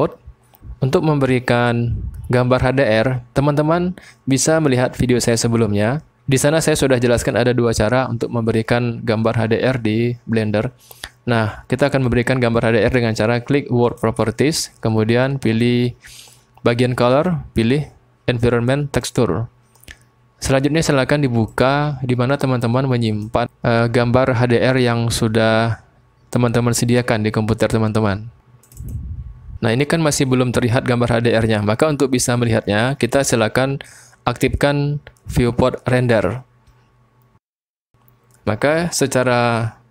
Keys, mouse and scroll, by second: 13.8 click, 17.1-19.2 drag, 21.5 click, 37.2 click.